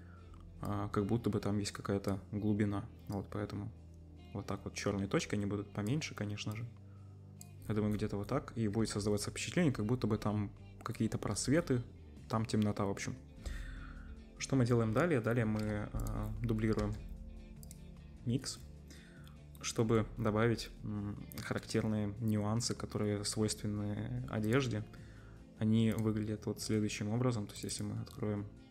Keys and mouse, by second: 7.0-8.0 middle drag, 8.9 ctrl+s, 9.3 middle click, 10.9 middle click, 15.3 middle click, 15.5-16.0 middle drag, 16.0 click, 16.1-28.7 drag, 16.8 shift+d.